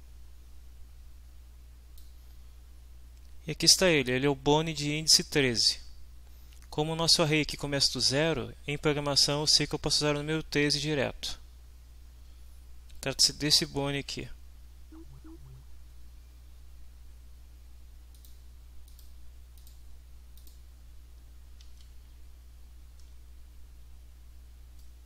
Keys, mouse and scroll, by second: 18.9 click, 19.5 click, 20.4 click, 21.7 alt+Tab, 24.8-25.0 drag.